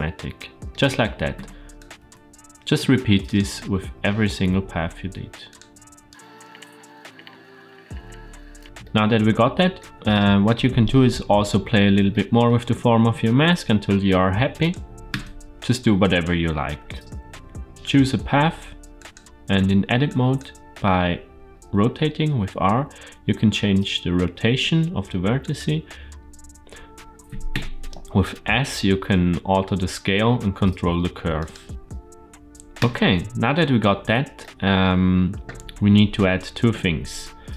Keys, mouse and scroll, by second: 0.0-0.5 middle drag, 1.2 Tab, 1.6 click, 2.6 a, 3.1-5.4 right drag, 5.9 right click, 6.4 shift+middle click, 6.5 Tab, 6.6 Tab, 6.6 click, 6.9 right click, 6.9-8.6 typing, 6.9 click, 6.9 right click, 7.1 Tab, 7.2 Tab, 7.3 click, 7.3 right click, 7.4 drag, 7.4 right click, 7.7 Tab, 7.7 click, 7.8 Tab, 7.9 click, 8.1 right click, 8.2 click, 8.5 middle click, 8.6 Tab, 8.6 scroll down 2, 8.7-9.7 shift+middle drag, 11.4-12.0 scroll up 2, 12.0-12.3 shift+middle drag, 14.4 click, 15.0 Tab, 15.4 click, 16.5 g, 17.7 click, 18.8 click, 19.4 Tab, 19.9 click, 21.5 r, 28.5 s, 31.6 g, 31.8 middle click, 31.8-32.6 scroll down 2, 32.6 Tab, 34.2-34.7 shift+middle drag, 34.9-35.7 scroll down 1.